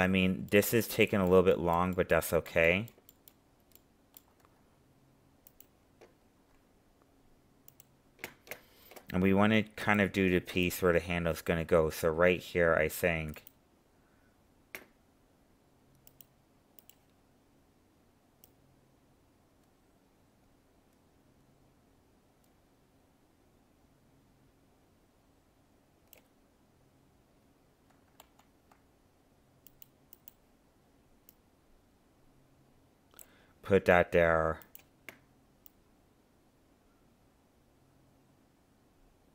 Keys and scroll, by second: 28.2 ctrl+z.